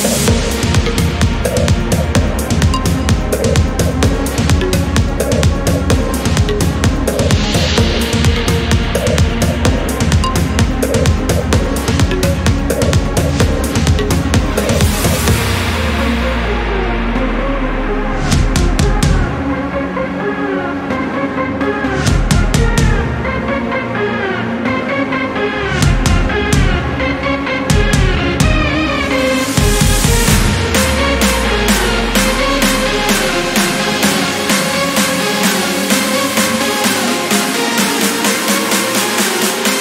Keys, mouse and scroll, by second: 0.5 click, 2.0 ctrl+click, 3.0 ctrl+click, 6.8 click, 7.6 scroll up 1, 8.7 click, 9.3 scroll down 1, 9.6 click, 11.2 click, 12.1 click, 13.3-13.6 scroll down 1, 13.9 scroll up 1, 15.5 click, 17.7 ctrl+click, 18.8 ctrl+click, 19.3 ctrl+click, 19.8 ctrl+scroll down 3, 23.8 click, 25.4 ctrl+click, 26.3 ctrl+click, 30.0 scroll up 2, 31.6 scroll down 2, 34.6 click, 37.4 ctrl+click, 38.4 ctrl+click, 39.0 click, 39.4-39.8 scroll down 1.